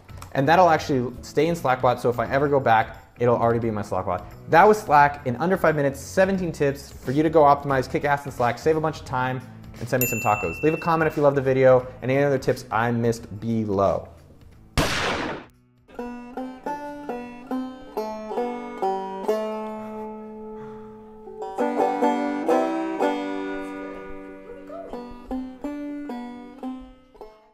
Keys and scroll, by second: 0.7-1.3 typing.